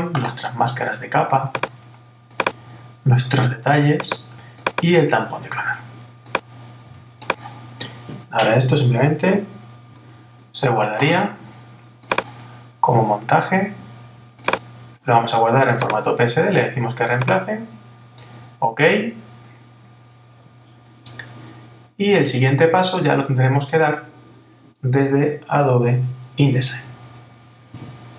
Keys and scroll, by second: 9.9 shift+super+s.